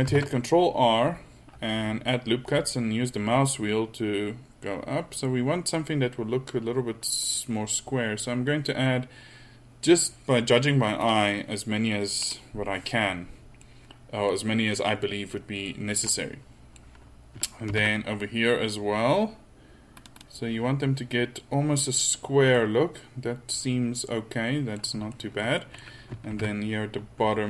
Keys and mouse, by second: 0.1 ctrl+r, 13.7-15.0 middle drag, 15.7 middle click, 15.9 middle click, 17.7 ctrl+r, 22.8-23.3 middle drag, 26.4 ctrl+r.